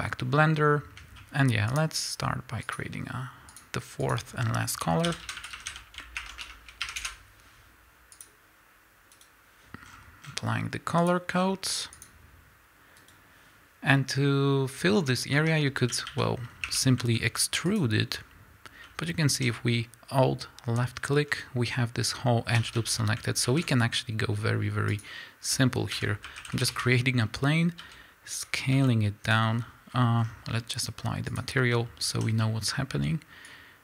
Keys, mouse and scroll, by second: 1.9 click, 2.7 click, 3.5 click, 7.0-9.1 drag, 7.0 Return, 14.9 scroll up 1, 15.3 Tab, 15.9 a, 16.6 1, 17.7 alt+click, 19.4 z, 22.5 a, 25.0 shift+a, 26.0 r, 26.8 KP_Enter, 27.8 s, 28.4 click, 28.7 s, 29.3 click, 31.3 click, 32.2 z, 32.4-33.5 middle drag, 33.5-33.8 drag.